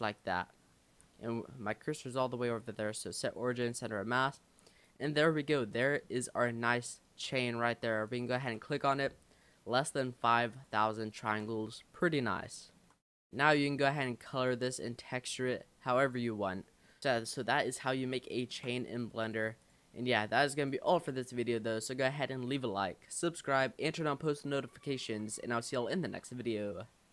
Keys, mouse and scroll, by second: 0.6-1.6 scroll down 5, 1.7-2.0 scroll up 3, 2.0-4.0 right drag, 4.0-4.9 scroll up 2, 4.9 click, 5.8 click, 6.1-8.1 middle drag, 8.1 click, 8.6 Tab, 10.5 click, 11.0 shift+middle click, 11.4-12.5 scroll up 7, 12.1 middle click, 12.5 shift+middle click, 13.3 click, 13.7 scroll down 1, 13.8-15.5 middle drag, 15.5-16.0 scroll down 1, 16.0 click, 16.6 middle click, 17.0-17.6 scroll down 2, 17.6 click, 18.2 shift+middle click, 18.7 click, 19.2 click, 19.6 click, 20.4 click, 20.9 click, 21.2 scroll up 2, 21.4-24.3 middle drag, 24.3-24.7 scroll up 1, 24.7 shift+middle click, 25.4 scroll up 2, 25.8-26.6 shift+middle drag, 26.6-26.9 scroll down 1.